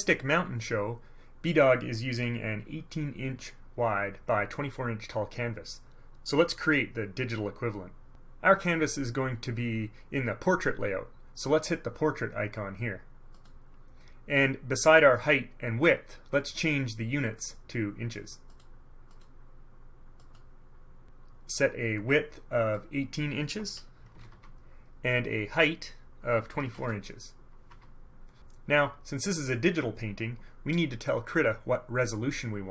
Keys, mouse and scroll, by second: 13.5 click, 17.5 click, 18.6 click, 19.2 click, 20.3 click, 22.9 click, 24.1 KP_1, 24.3 KP_8, 24.4 Tab, 26.8 KP_2, 26.9 KP_4, 27.8 Tab.